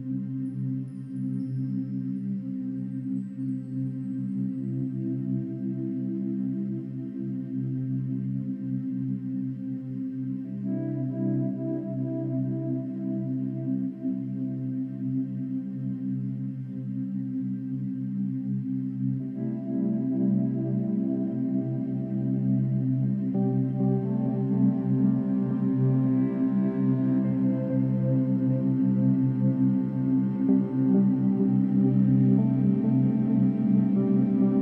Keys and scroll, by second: 16.6 ctrl+-, 16.7 ctrl+=, 23.8 ctrl+-, 24.1 ctrl+=, 24.5 space.